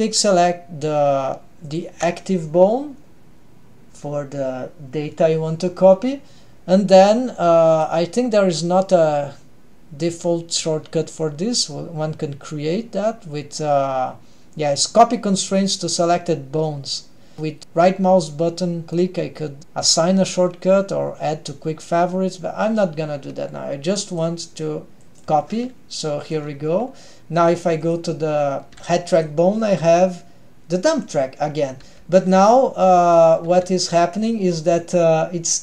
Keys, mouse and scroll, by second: 1.8 shift+click, 7.8-25.4 drag, 26.3 drag, 27.6 drag, 27.9 drag, 28.8 middle click, 28.8 g, 32.6-33.4 middle drag, 33.5 g, 35.5-35.6 drag.